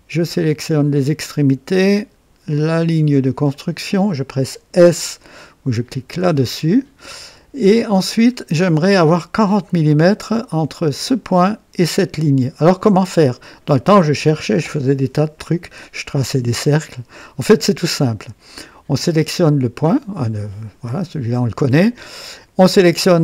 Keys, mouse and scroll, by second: 0.6 click, 1.9 click, 3.5 click, 3.7 typing, 6.1 typing, 7.9 scroll up 1, 8.4 right click, 18.9 click.